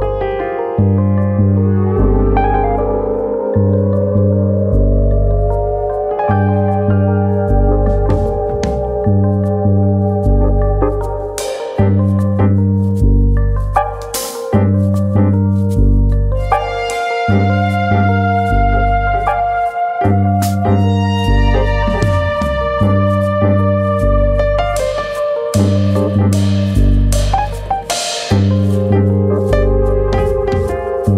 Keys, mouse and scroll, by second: 1.5 click, 2.3 ctrl+KP_Add, 2.5 ctrl+KP_Add, 2.8 ctrl+KP_Add, 3.0 ctrl+KP_Add, 3.8 KP_7, 6.7 alt+s, 7.8 click, 9.1 shift+d, 10.8 click, 13.3 click, 17.3 click, 17.6 shift+d, 19.0 click, 21.1 alt+s, 22.1 right click, 22.4 s, 23.4 click, 24.0 click, 25.0 s, 25.8 click, 26.2 click, 30.5 click, 30.8 l.